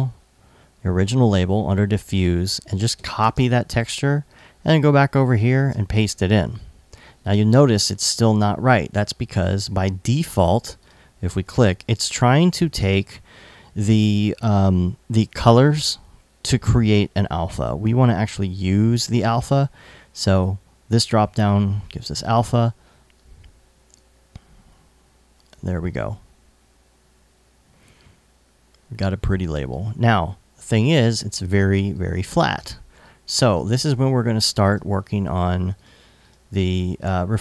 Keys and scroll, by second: 2.6 super+c, 31.4 i, 34.3 super+s.